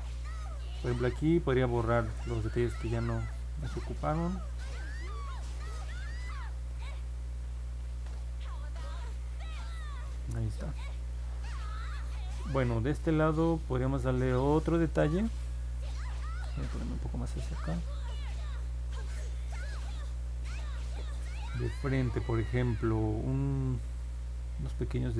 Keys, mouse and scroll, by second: 0.1 click, 2.1 click, 2.5 click, 2.9 click, 3.4 click, 3.7 click, 4.0 click, 4.4 click, 4.7-5.9 drag, 6.8 click, 7.2-8.9 drag, 14.9-15.3 scroll down 2, 15.5 scroll up 2, 16.2 alt+middle click, 17.0-17.7 scroll up 4, 18.2 scroll up 2, 18.9 alt+middle click.